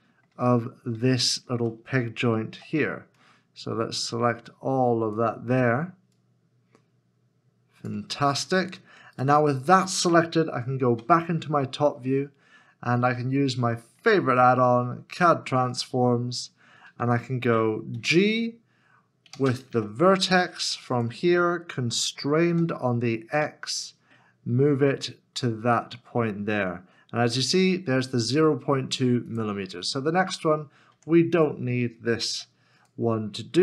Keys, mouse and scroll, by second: 0.6 scroll, 0.8 scroll up 1, 1.3 shift+middle click, 2.5 c, 9.2 c, 9.2 right click, 10.9 KP_7, 13.1 shift+middle click, 19.3 space, 19.7 v, 22.5 x, 29.8 x, 29.8-30.3 scroll down 1, 32.3 Tab.